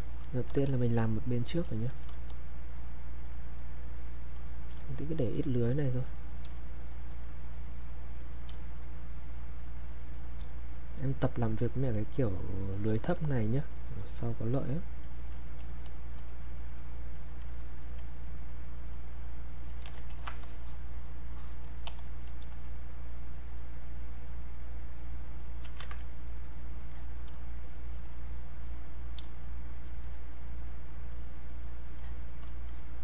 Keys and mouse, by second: 2.7-6.1 drag, 6.5 space, 6.9 click, 7.0 space, 7.2 click, 7.5 click, 8.5 space, 8.9 click, 9.0 space, 9.9 click, 10.0 space, 10.7 click, 13.9 click, 17.6 alt+click, 20.1 ctrl+shift+1, 20.4-25.0 drag, 25.8 ctrl+z, 26.2 click, 27.3 space, 27.7 click, 27.8 space, 28.1 click, 29.2 space, 29.6 click, 29.7 space, 30.0 click, 32.7 shift+click.